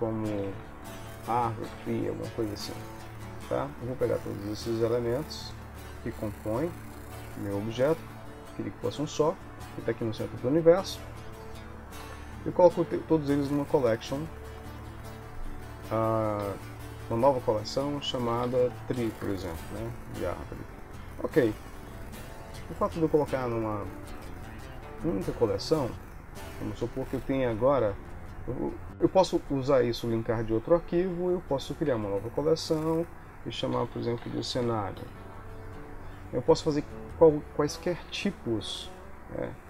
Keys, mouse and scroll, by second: 4.6 click, 6.4 middle click, 8.1 KP_1, 12.9 m, 17.0 m, 20.6 Return, 20.6 e, 21.3 ctrl+s, 24.3 click, 26.7 click, 27.6 click, 32.2 c, 33.9 click, 39.1 shift+a.